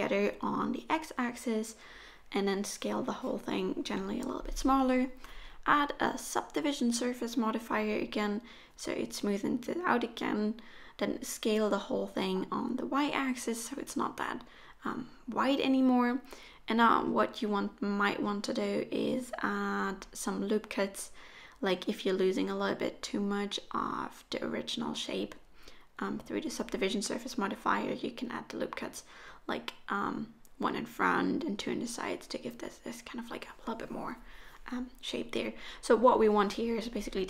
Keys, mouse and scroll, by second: 3.2 click, 8.4 middle click, 9.3-9.7 scroll up 1, 9.7-10.5 scroll down 1, 10.5-10.8 scroll down 2, 10.5 s, 12.0 a, 12.5 s, 15.5-15.9 scroll up 4, 15.9 shift+middle click, 16.4-17.4 scroll up 2, 16.9 middle click, 18.0-18.6 scroll up 3, 18.6 middle click, 19.5 middle click, 21.4 click, 22.3 s, 24.9 middle click, 26.3 ctrl+r, 27.9 middle click, 28.8 ctrl+r, 31.3 ctrl+r, 33.4 middle click, 34.8-35.1 scroll down 1, 35.1 middle click, 37.0 right click.